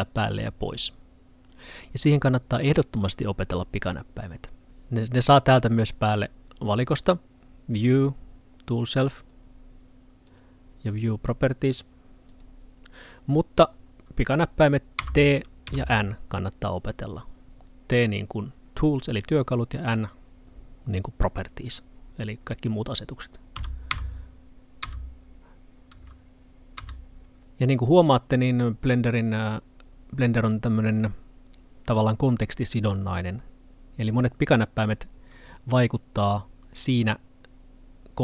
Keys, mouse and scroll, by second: 5.3 click, 15.0 t, 15.7 n, 23.6-23.9 typing, 26.0 t, 26.8 t.